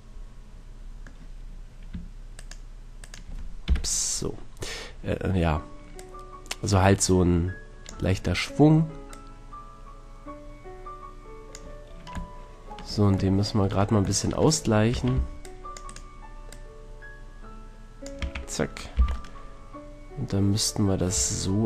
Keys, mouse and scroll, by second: 1.4-2.4 middle drag, 2.4-3.6 right drag, 3.6 KP_7, 6.0-7.8 drag, 9.1-10.9 drag, 12.3-15.1 middle drag, 14.9 a, 15.1 c, 15.9-17.8 right drag, 16.5-18.0 drag, 18.2 click, 18.2 a, 19.0 z, 21.1 Tab.